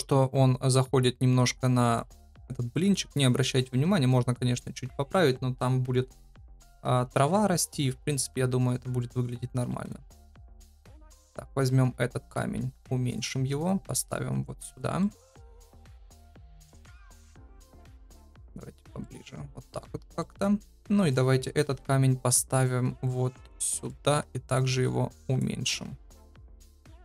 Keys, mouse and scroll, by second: 9.8 click, 10.6 KP_7, 11.5 g, 12.5 s, 13.3 g, 13.8 r, 14.9 middle click, 16.0 g, 17.1 KP_7, 17.8 shift+middle click, 18.1 g, 18.9 middle click, 20.1 middle click, 21.6 KP_7, 22.5 g, 23.6 middle click, 24.0 s, 24.7 g, 26.0 KP_0, 26.8 middle click.